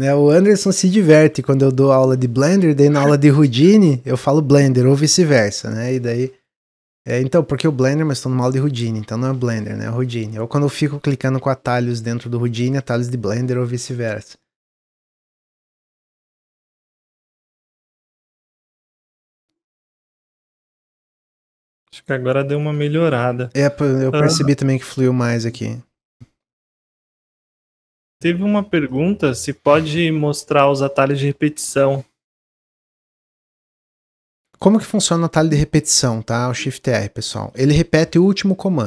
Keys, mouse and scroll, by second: 12.2-15.3 middle drag, 18.9 click, 19.3 middle click, 20.1 scroll down 1, 20.4-22.6 middle drag, 22.6-25.5 drag, 32.6-32.9 middle drag, 32.9 scroll down 2, 34.1 click, 34.9-36.9 shift+middle drag, 36.9 click.